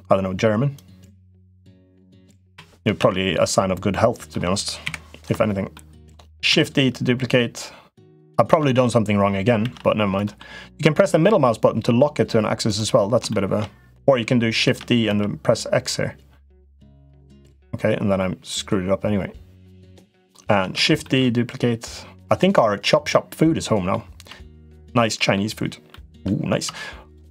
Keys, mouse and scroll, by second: 0.6 click, 2.2 KP_7, 2.7 alt+z, 3.8 middle click, 4.6 KP_7, 5.5 shift+middle click, 6.3 shift+d, 9.4 shift+d, 13.1 shift+middle click, 14.5 shift+d, 18.3-20.3 drag, 20.6 shift+d, 22.9 middle click, 24.1 Tab, 24.6 middle click, 25.6 middle click, 26.4 Tab, 26.8 click.